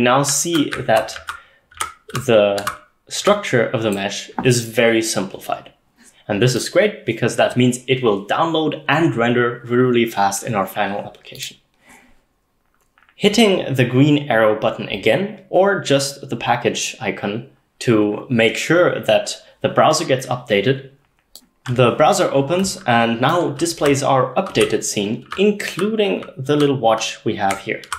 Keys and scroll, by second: 0.1-3.3 typing, 23.6-27.9 typing.